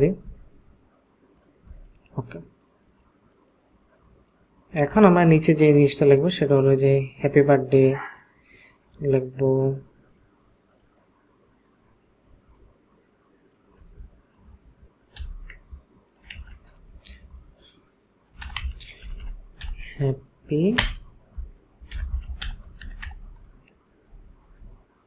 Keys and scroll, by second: 1.7 ctrl+space, 16.4 ctrl+a, 18.2-24.4 typing.